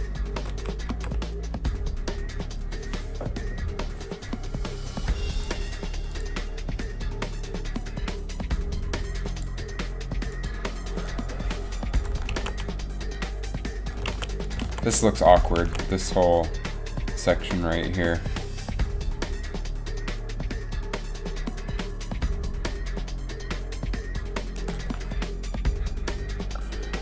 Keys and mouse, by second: 0.0 Right, 0.5 Right, 0.7 Right, 1.1 Left, 1.6 Right, 1.6 Left, 1.8 Right, 1.8 Left, 12.5 alt+a, 13.6 alt+a, 14.3 alt+a, 14.9 alt+a, 15.9 alt+a.